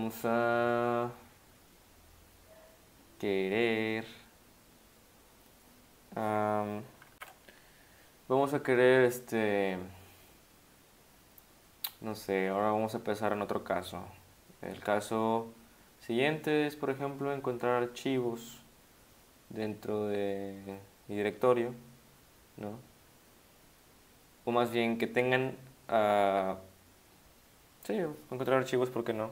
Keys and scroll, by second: 7.2 ctrl+super+r.